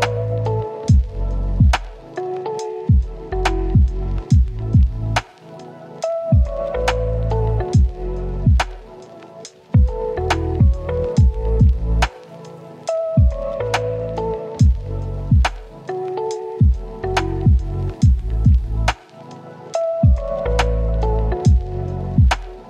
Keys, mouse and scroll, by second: 0.4 click, 0.9 scroll up 1, 1.0 right click, 1.8 scroll up 1, 1.9 right click, 2.4 ctrl+shift+click, 3.6 scroll down 1, 3.7 scroll up 1, 3.8 right click, 4.8 click, 5.2 right click, 6.7 right click, 9.6 click, 10.0 right click, 10.2 scroll down 1, 10.3 scroll up 1, 10.4 right click, 10.7 scroll down 1, 10.8-11.4 scroll up 2, 10.9 right click, 11.4 click, 11.8 click, 17.0 right click, 17.8 click, 18.7 right click, 19.2-19.5 scroll up 1, 19.5 click, 22.4 scroll down 1, 22.5 right click.